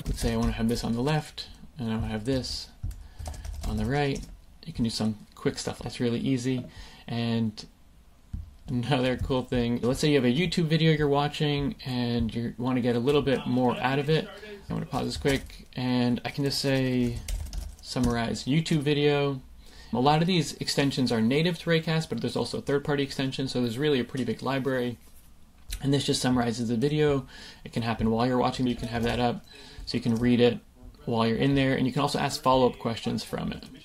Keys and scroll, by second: 1.1 Return, 3.2 super+space, 3.7 t, 4.1 Return, 15.2 super+space, 17.5 r, 18.0 Return, 28.9 super+space.